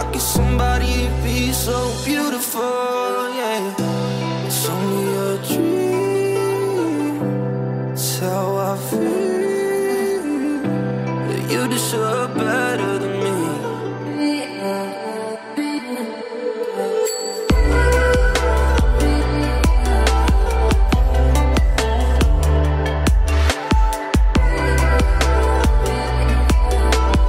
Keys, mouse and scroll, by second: 0.8-1.1 alt+scroll up 1, 1.1-1.5 alt+scroll down 1, 1.5-2.1 alt+scroll up 1, 2.3 ctrl+shift+x, 6.2 ctrl+shift+x, 6.3 alt+scroll down 1, 7.2-7.6 ], 8.0 ], 8.2 ], 8.7-9.4 drag, 13.2-14.2 typing, 14.5-15.5 drag, 17.6-19.1 typing, 18.4 click, 19.4 click, 23.1 ], 23.2 ], 23.4 click, 23.8 [, 24.1-25.0 drag.